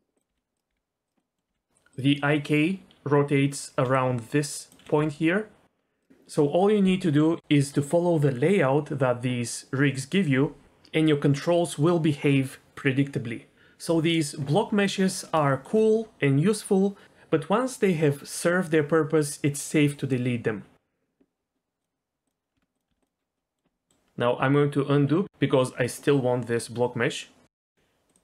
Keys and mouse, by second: 0.3 g, 0.7 r, 1.2 middle click, 1.5 g, 1.9 click, 3.8 d, 3.9 click, 4.7 d, 4.8 d, 5.0 r, 8.2 click, 8.4 middle click, 14.6 middle click, 15.5 shift+middle click, 21.8-22.1 drag, 22.2 click, 22.5 Tab, 22.7 click, 22.9 x, 23.4 middle click, 23.9 middle click, 25.8 ctrl+z, 26.0 ctrl+z.